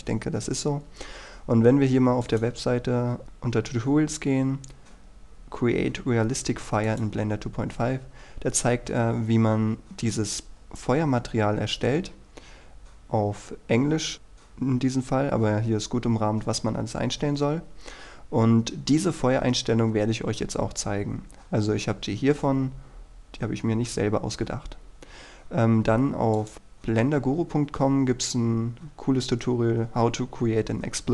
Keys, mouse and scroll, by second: 8.3-10.2 scroll down 1, 15.3-17.3 scroll up 1, 17.3-21.2 scroll down 1, 24.1-24.5 scroll up 1, 24.5-25.1 scroll down 1, 25.1-26.5 scroll up 1, 26.5 click, 27.5-28.3 scroll down 1, 28.3-31.1 scroll up 1.